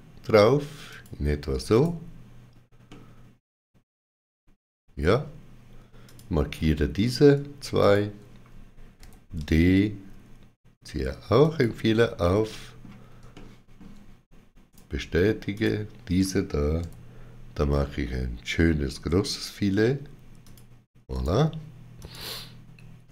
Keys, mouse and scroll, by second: 0.8 shift+click, 1.6 right click, 2.7 middle click, 5.9 click, 6.5 middle click, 7.7 shift+click, 8.9 d, 11.3 shift+click, 12.1 middle click, 13.2 shift+middle click, 14.6 right click, 15.4 click, 16.7 d, 20.3 click, 21.0 right click, 21.9 click.